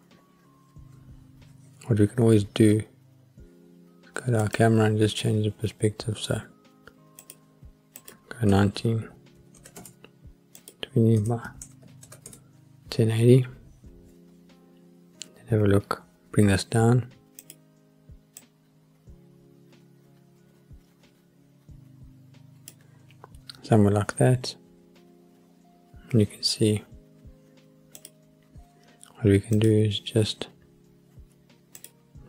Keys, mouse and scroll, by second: 4.4 click, 7.2 click, 8.0-9.8 drag, 10.6-12.3 drag, 14.8-16.1 scroll up 1, 17.4 click, 18.4-22.7 drag, 28.0 click, 29.5 click, 31.8 click.